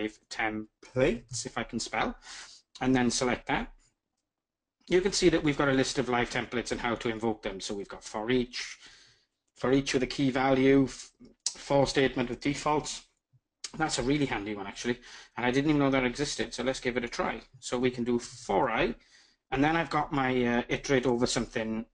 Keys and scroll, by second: 18.2 Tab.